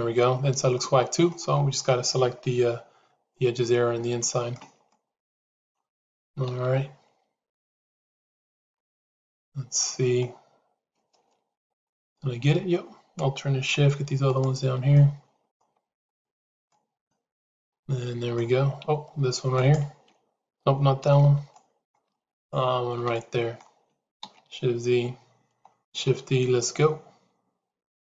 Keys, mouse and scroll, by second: 0.6 middle click, 2.3 KP_Decimal, 4.1 shift+middle click, 4.8 shift+middle click, 8.3 shift+z, 8.4 middle click, 8.8-10.1 middle drag, 11.5 alt+click, 13.6 shift+a, 14.3 click, 14.8 middle click, 15.7 shift+a, 16.6-18.3 middle drag, 19.0 shift+a, 20.9 ctrl+z, 21.5 middle click, 22.0 shift+a, 22.3 shift+click, 23.0 middle click, 24.6 shift+z.